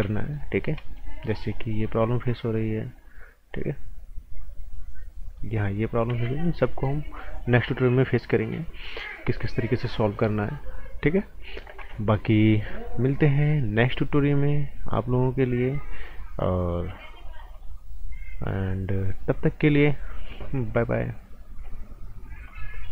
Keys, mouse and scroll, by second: 0.1 right click, 0.5 scroll up 1, 0.7 right click, 1.5 click, 6.1 ctrl+z, 6.4 scroll down 1, 6.6 right click, 12.6 click, 22.4 click.